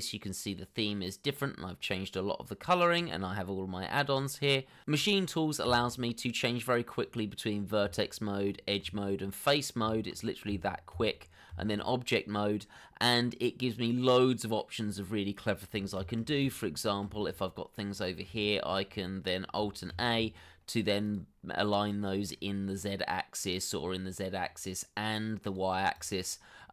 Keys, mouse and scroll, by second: 0.7 scroll up 1, 1.0 middle click, 3.0 scroll up 1, 3.8 middle click, 7.3 Tab, 9.5 Tab, 16.3 middle click, 17.7 shift+d, 18.6 scroll down 1, 18.8 shift+middle click, 19.1 middle click, 20.1 shift+click, 20.4 shift+double click, 20.6 middle click, 21.6 alt+a, 23.8 double click, 24.2 middle click.